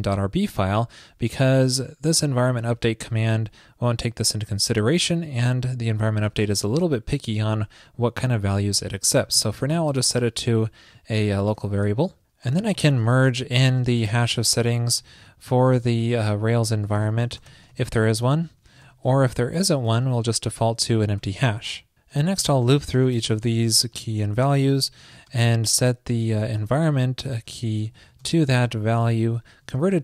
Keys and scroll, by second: 11.5 super+Return, 21.2 super+Return, 28.0 super+Right.